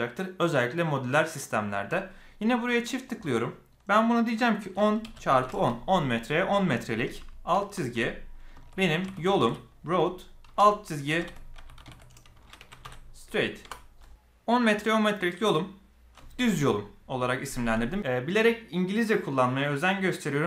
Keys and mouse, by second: 2.9-14.2 drag.